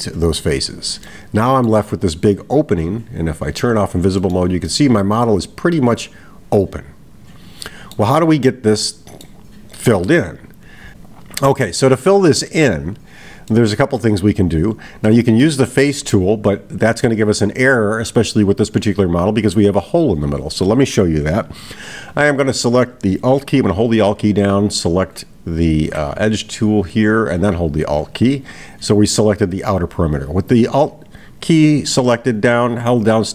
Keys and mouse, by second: 1.1 middle click, 3.6 click, 4.2 middle click, 4.7-8.0 middle drag, 8.9-9.5 middle drag, 13.5-14.2 middle drag, 15.1 middle click, 24.7 alt+click, 27.0 click.